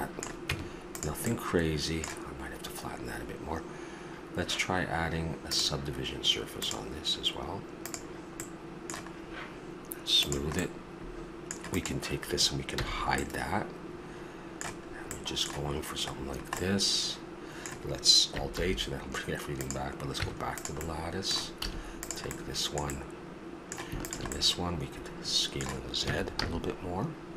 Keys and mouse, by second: 0.5 Tab, 5.5-8.4 drag, 8.4-9.2 middle drag, 10.2-12.3 drag, 12.7 h, 13.5-14.1 middle drag, 17.7 middle click, 18.5 alt+h, 19.6-20.2 drag, 20.2 Tab, 20.8 middle click, 21.6 a, 22.0 right click, 23.1 middle click, 24.4 click, 25.3 middle click, 26.0 s.